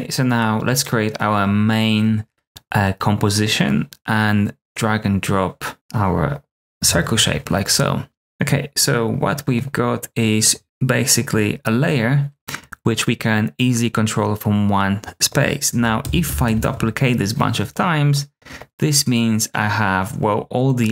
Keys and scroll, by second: 0.0-0.4 typing, 8.1 typing, 16.0 super+d, 16.2 super+d, 16.9 super+d.